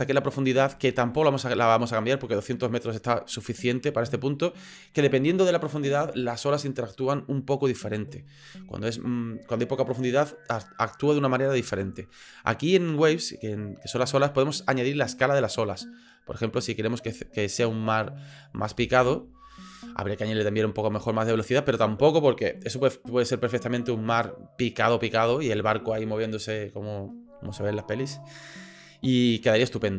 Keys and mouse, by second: 12.9 click, 15.8-18.4 drag, 18.7 space.